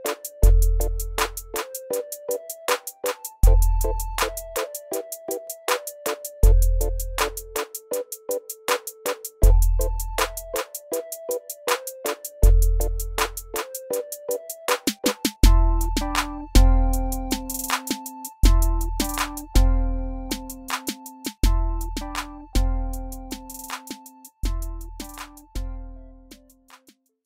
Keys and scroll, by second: 2.5 alt+w, 6.8 w, 11.6 r, 15.9 F4, 22.4 F4, 23.2 alt+w, 24.8 F4.